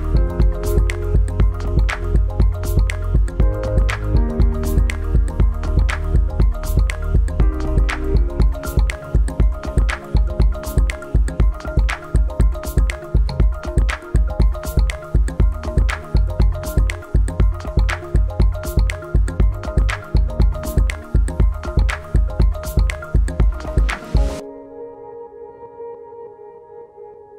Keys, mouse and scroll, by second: 12.9 click, 15.6 click, 18.8 click.